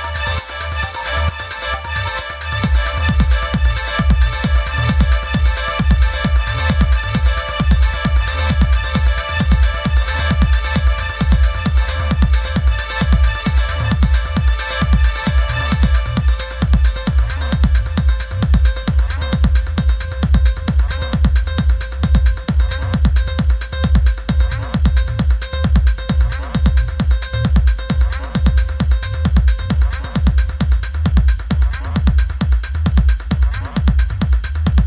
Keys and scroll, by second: 13.2 i, 17.7 Up, 18.7 super+c, 18.9 super+f, 19.3 shift+Right, 33.2 shift+Left.